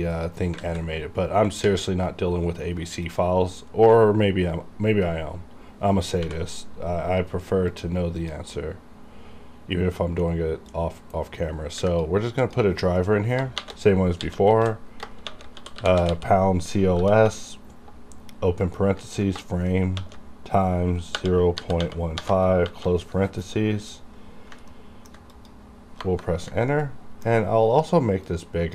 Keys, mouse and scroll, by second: 0.5-1.6 scroll down 3, 0.6 alt+z, 3.0 click, 6.3 n, 7.7 click, 10.7-12.4 drag, 13.6-17.0 typing, 20.0 shift+*, 21.1 0, 22.2-22.7 typing, 24.7 ctrl+middle click, 25.4 click, 26.1 KP_Enter, 26.7 ctrl+middle click, 28.3 click.